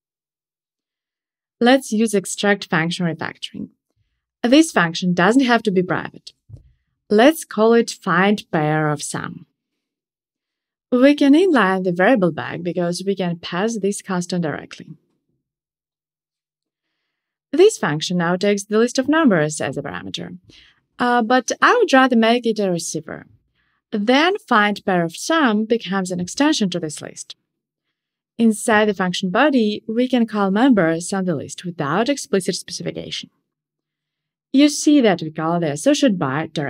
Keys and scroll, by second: 0.2 alt+super+m, 11.1 alt+super+n, 21.2 alt+Return.